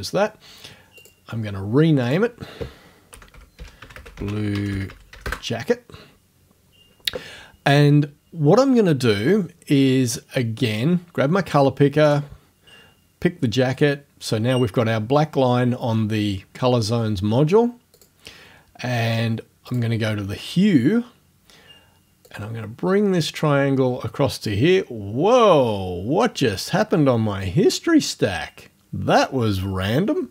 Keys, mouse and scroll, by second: 1.0 click, 2.1 click, 2.9-5.7 typing, 5.8 click, 10.7 click, 12.1 click, 18.0 click, 19.7 click, 22.3-24.6 drag.